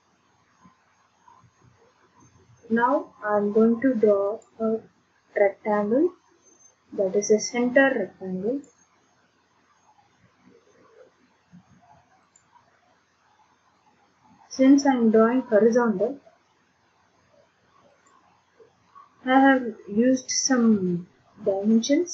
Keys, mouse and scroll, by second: 4.4 click, 8.6 click, 12.3 click, 18.0 click.